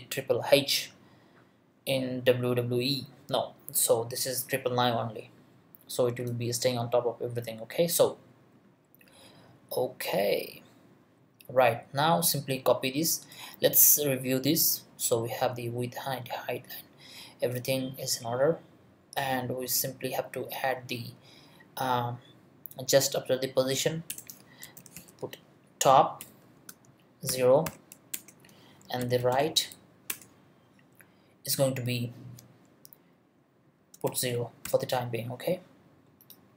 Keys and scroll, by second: 24.1 Return, 24.4-25.4 typing, 26.2 Return, 26.5-29.8 typing, 28.1 Return, 30.1 Return, 34.0 0, 34.6 ;.